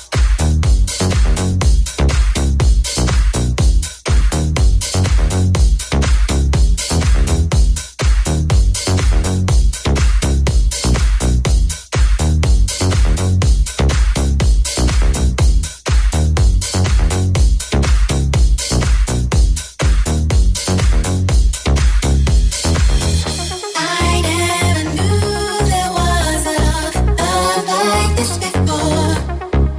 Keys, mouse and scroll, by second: 4.7-8.2 alt+drag, 4.7 alt+middle click, 4.7 alt+right click, 5.1 x, 5.8 alt+right click, 7.7 middle click, 7.7 right click, 9.3-29.7 drag, 14.2 Tab, 16.7 Tab, 18.3 middle click, 18.3 right click, 23.1 alt+right click.